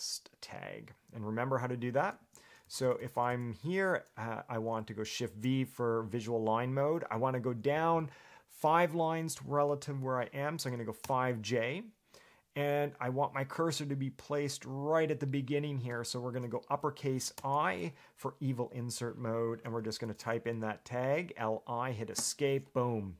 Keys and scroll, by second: 2.4 Escape, 2.8-3.5 typing, 5.4 shift+v, 10.8 5, 11.2 j, 17.5 shift+i, 19.8-20.9 typing, 22.3 Escape.